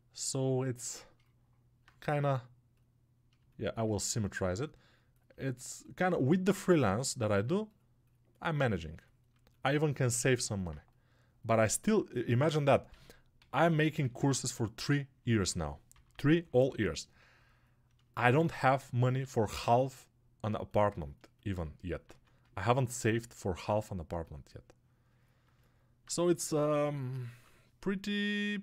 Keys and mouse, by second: 15.1-17.9 ctrl+alt+middle drag, 17.9-19.4 alt+shift+drag, 19.4-21.6 ctrl+alt+right drag, 21.6-28.6 alt+drag.